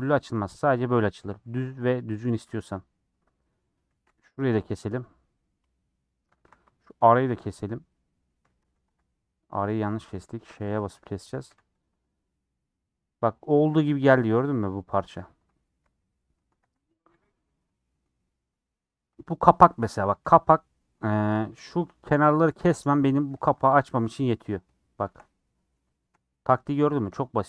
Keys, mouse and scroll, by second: 1.1 a, 2.6 middle click, 3.1 scroll up 2, 3.4 middle click, 4.0 2, 4.8-6.3 middle drag, 6.3 3, 8.2 middle click, 8.6 a, 8.8 u, 9.6 ctrl+z, 10.0 ctrl+z, 10.9 ;, 11.3 a, 11.8 u, 14.2-15.8 middle drag, 15.8 /, 16.4 Tab, 16.6 h, 17.2 click, 17.5 middle click, 17.9 scroll up 2, 18.2-20.1 middle drag, 20.1 3, 20.3-21.6 middle drag, 23.5 ;, 24.0 3, 24.5 click, 25.3 middle click, 26.1-27.0 scroll up 7, 27.0-27.4 middle drag.